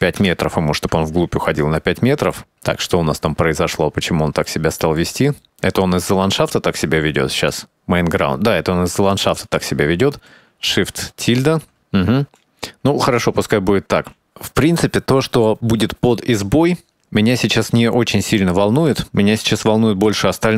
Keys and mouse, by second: 0.7 middle click, 1.8 middle drag, 3.3-3.6 middle drag, 3.9-4.3 middle drag, 4.9-5.2 middle drag, 5.4 middle click, 7.2 click, 9.2 click, 10.3 shift+`, 20.2 KP_0.